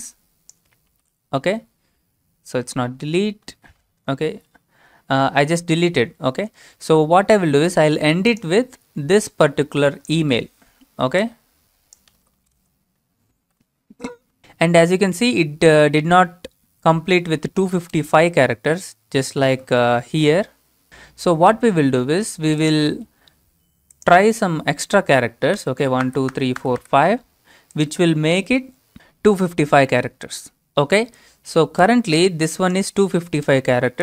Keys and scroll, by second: 0.9 ctrl+v, 2.6 ctrl+z, 4.0 BackSpace, 10.2 ctrl+c, 12.1 ctrl+c, 12.6 alt+Tab, 13.4 ctrl+v, 17.9 typing.